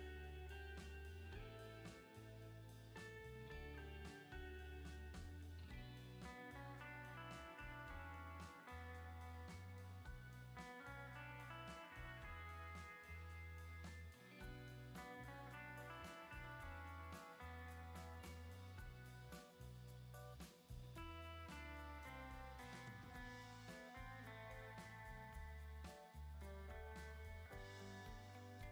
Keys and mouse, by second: 3.9 ctrl+z, 5.1 ctrl+z, 7.0 ctrl+z, 19.6 ctrl+z, 24.9 shift+middle click, 28.3 ctrl+z.